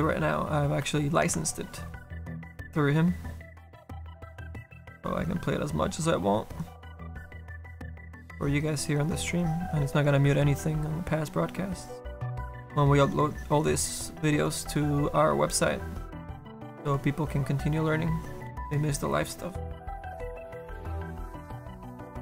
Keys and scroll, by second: 2.4 s, 20.6 s.